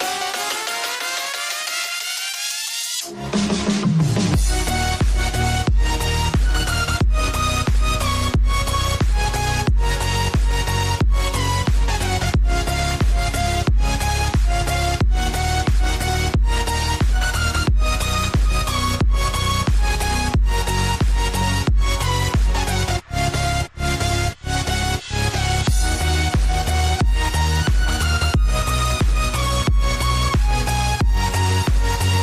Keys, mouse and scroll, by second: 3.1-6.0 drag, 7.1-8.8 drag, 11.2-12.6 drag, 13.4 click, 16.4 click, 17.7 click, 18.9 click, 20.6-23.7 drag, 25.9 click, 26.6 click, 27.3 click, 28.4 click, 29.1 click, 29.9-32.2 drag.